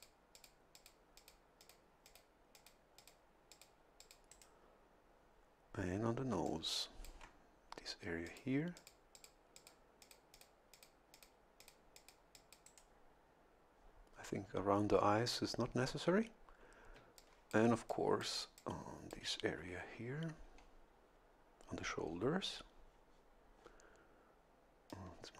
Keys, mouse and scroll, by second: 0.3 click, 0.7 click, 1.2 click, 1.6 click, 2.1 click, 2.5 click, 3.0 click, 3.5 click, 4.0 click, 4.3 right click, 6.3 a, 6.5 click, 8.3 click, 8.8 click, 9.1 click, 9.6 click, 10.0 click, 10.7 click, 11.1 click, 11.6 click, 12.3 click, 12.6 right click, 17.0 a, 17.2-19.3 drag, 24.9 click.